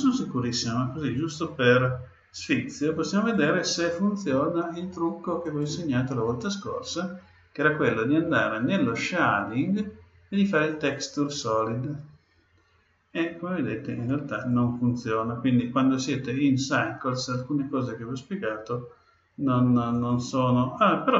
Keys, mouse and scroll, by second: 5.4-7.3 drag, 10.7-12.5 drag, 14.3-16.1 drag.